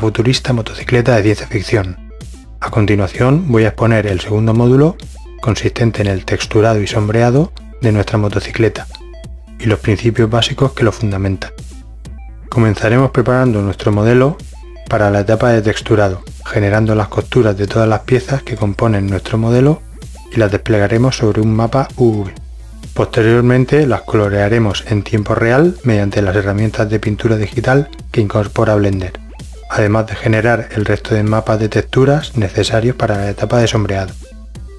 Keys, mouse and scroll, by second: 0.5 middle click, 1.7-2.4 right drag, 2.6-3.5 middle drag, 4.6 middle click, 5.3 ctrl+e, 6.1 middle drag, 6.4 click, 6.9 middle drag, 8.3 a, 8.7 a, 9.1 ctrl+e, 10.1 middle click, 10.5 middle click, 11.0 middle drag, 11.2 middle click, 11.3 ctrl+e, 13.3 middle click, 15.2 middle click, 15.6 middle click, 16.5 middle drag, 17.8-19.0 middle drag, 19.3 middle click, 20.7 right click, 23.4-23.8 middle drag, 25.6-25.9 middle drag, 26.5 middle click, 27.3 middle click, 28.0 click, 31.6-32.4 drag, 32.6 click, 33.4-34.0 middle drag, 34.6 middle click.